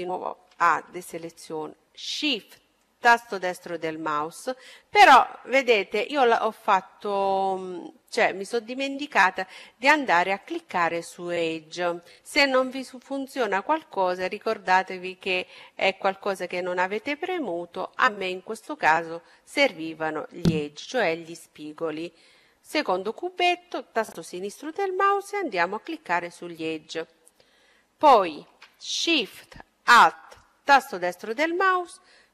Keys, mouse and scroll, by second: 2.1-3.8 right drag, 4.4-6.3 middle drag, 9.8-11.6 drag, 16.3-18.1 drag, 19.6-21.4 drag, 29.5-31.4 right drag.